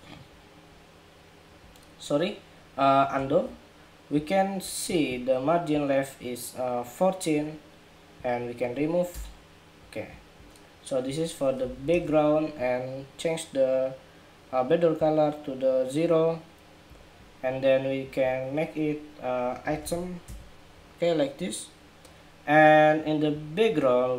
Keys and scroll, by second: 3.0 super+z.